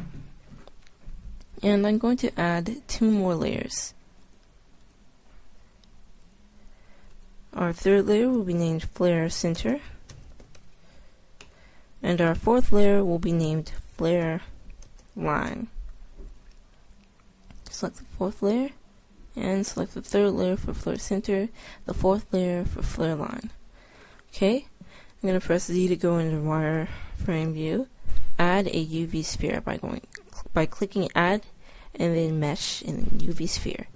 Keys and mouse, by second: 2.7-4.2 drag, 24.3-27.4 middle drag, 25.9 z.